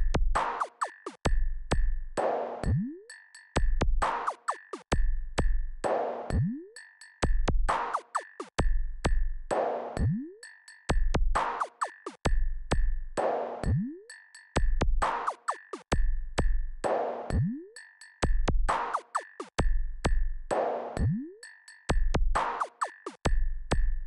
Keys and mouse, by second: 1.2 click, 15.1-18.0 drag, 21.0-22.5 drag.